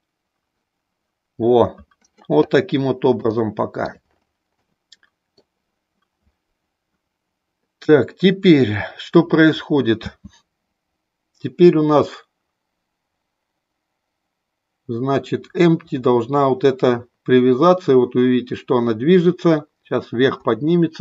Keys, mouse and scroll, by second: 3.3 shift+middle click, 4.6 middle click, 10.0 space.